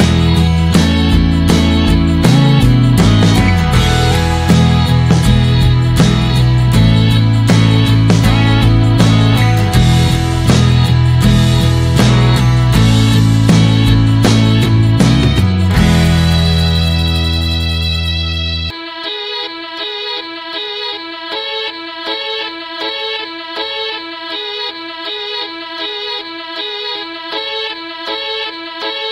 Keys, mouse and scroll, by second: 0.5 click, 6.4 click, 6.9 s, 12.4 s, 13.4-15.8 drag, 15.8 s, 22.4-24.8 drag, 24.8 s, 25.8-26.9 drag, 27.2 s.